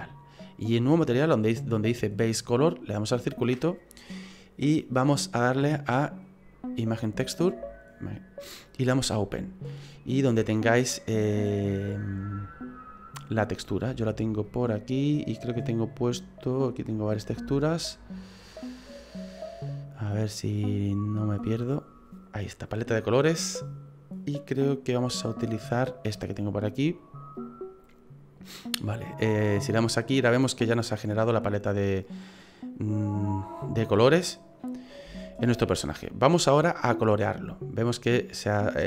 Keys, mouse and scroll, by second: 3.0 click, 8.9 click, 29.6 click, 30.4 middle click, 35.2 shift+middle click, 37.3 middle click.